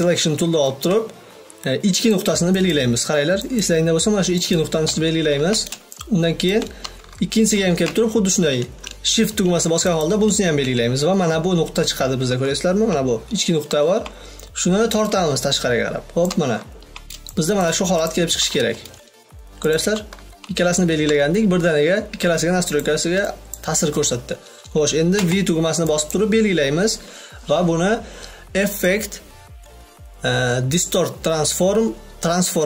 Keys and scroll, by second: 24.4 v.